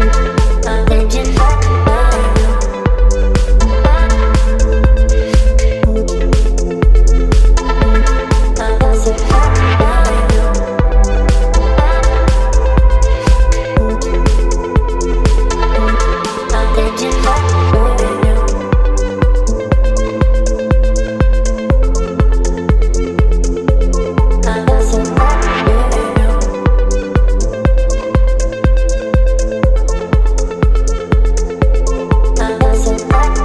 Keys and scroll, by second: 8.0 b, 9.1 ], 12.2 x, 13.6 space, 15.2 space, 16.2 [, 16.3 [, 20.4 space, 21.4 [, 21.7 [, 24.2 ], 24.2 ], 24.3 ], 26.1 [, 28.6 space, 31.7 space, 32.3 space.